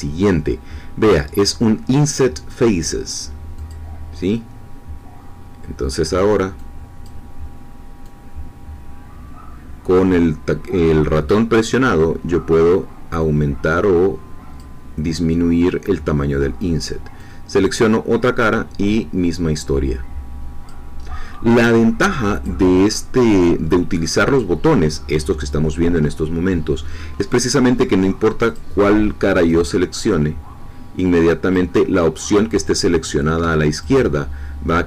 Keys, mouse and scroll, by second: 3.6 click, 7.0-17.8 drag, 18.5-20.8 drag, 21.2 middle click, 22.4-24.5 drag, 26.0-28.4 middle drag, 28.4 click, 29.7-32.4 drag, 33.8-34.8 drag.